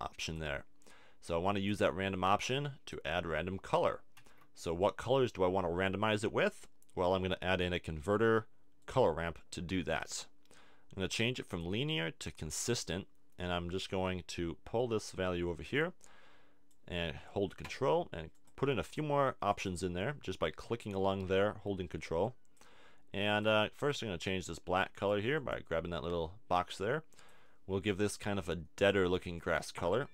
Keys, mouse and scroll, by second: 0.5 middle click, 2.3 click, 4.2 shift+a, 10.0-17.0 drag, 18.3-29.0 drag.